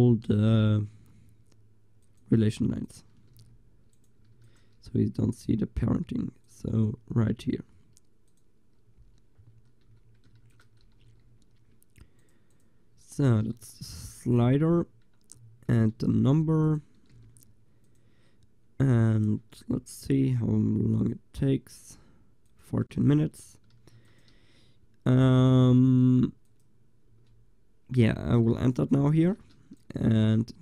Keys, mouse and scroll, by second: 3.4 g, 4.4 ctrl+s, 9.9 n, 10.4 ctrl+s, 11.1 g, 12.6-13.0 drag, 13.9 g, 16.0 alt+h, 16.7-19.2 drag, 17.2 g, 23.9 ctrl+s, 25.8 g, 27.1 g, 28.1-30.6 drag, 29.1 ctrl+s, 29.8 right click, 30.1 g.